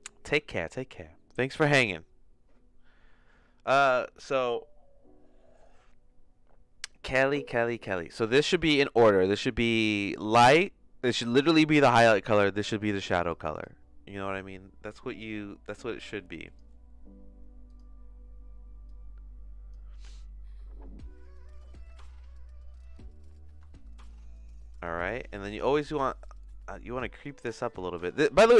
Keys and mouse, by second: 12.7 click, 13.5 click, 17.7 click, 21.9-27.9 drag.